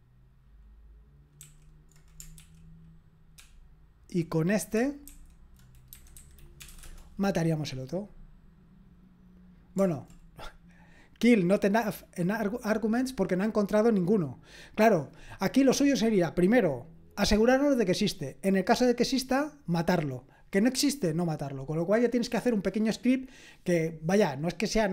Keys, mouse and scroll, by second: 1.4 super+k, 2.4 ctrl+k, 3.4 ctrl+p, 5.0 alt+f, 5.9 Left, 6.1 Left, 6.6 BackSpace, 6.6 BackSpace, 6.8 Return.